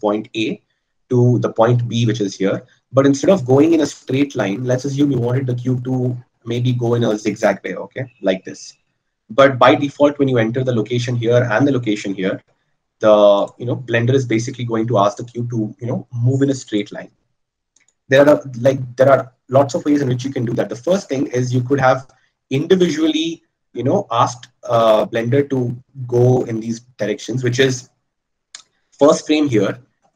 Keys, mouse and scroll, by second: 13.6-15.4 drag.